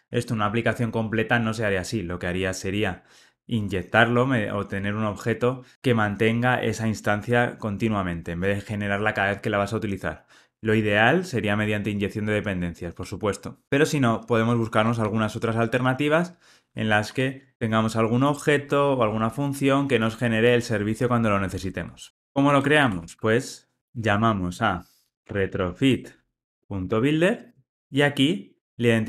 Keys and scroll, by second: 15.1 alt+super+l, 27.4 Return.